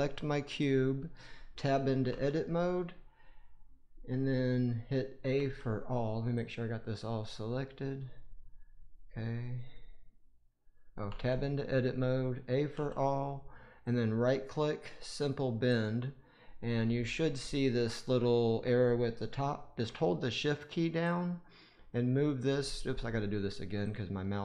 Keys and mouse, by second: 2.0 Tab, 5.3 a, 6.2 click, 7.7 click, 11.0 Tab, 12.6 a, 13.7 right click, 16.4-24.4 drag.